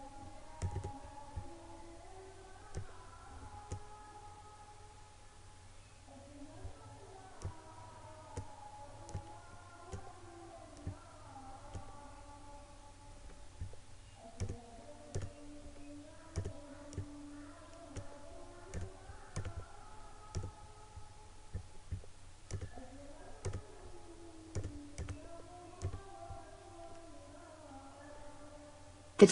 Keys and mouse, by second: 7.5-14.0 drag, 14.5-29.3 drag.